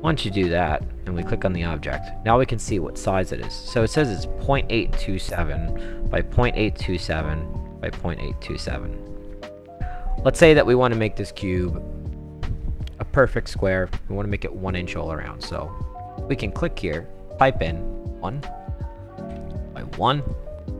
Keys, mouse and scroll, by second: 0.5 click, 1.5 click, 7.0 click, 9.5 click, 10.1 click, 14.7 click, 15.5 click, 17.4 1, 18.3 click, 19.3 1, 20.2 click.